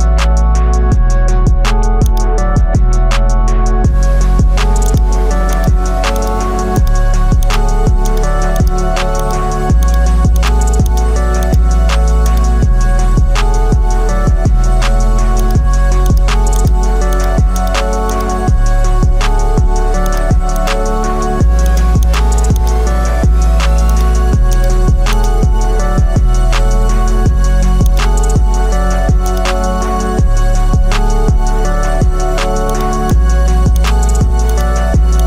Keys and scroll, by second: 13.8 ctrl+alt+z.